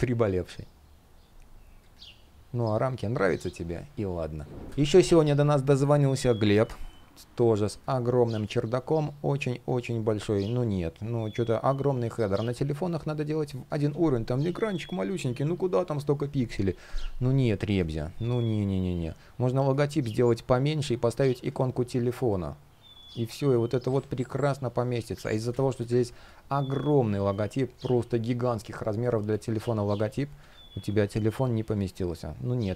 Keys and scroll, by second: 13.5 super+z, 17.3 super+z, 24.9 super+z, 25.6 super+z, 30.0 super+z.